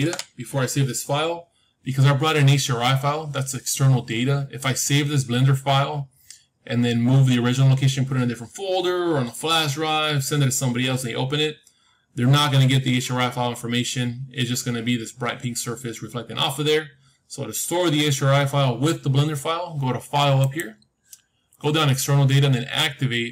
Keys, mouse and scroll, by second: 11.8-15.1 middle drag, 16.2-18.3 middle drag, 16.2-17.0 scroll down 1, 17.0-18.3 scroll down 1, 20.3-22.3 drag.